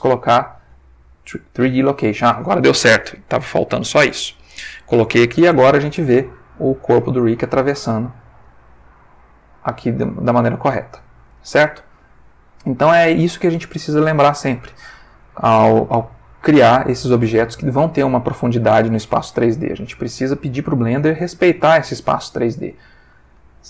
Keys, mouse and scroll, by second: 2.7-5.5 middle drag, 5.6-9.9 middle drag, 11.0 click, 12.0 ctrl+middle click, 20.3 click, 21.8 click, 22.6-23.3 ctrl+middle drag, 23.4 ctrl+shift+middle click.